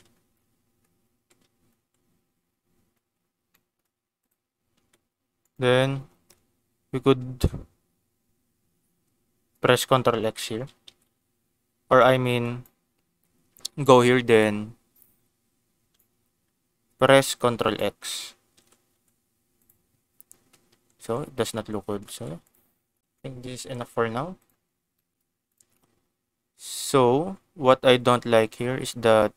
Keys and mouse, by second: 1.1 Tab, 1.7 Tab, 3.5 shift+middle click, 4.2 middle click, 4.7 Tab, 5.4-9.9 right drag, 10.1 ctrl+x, 10.8 ctrl+z, 11.8 1, 12.4 click, 13.8 click, 14.3 click, 15.0-16.0 drag, 16.9 click, 18.5 ctrl+x, 18.9 Tab, 19.5 click, 20.8 ctrl+z, 21.5 ctrl+z, 22.1 Tab, 22.4 click, 22.8 ctrl+s, 23.5 shift+middle click, 24.3 click, 24.9 shift+middle click.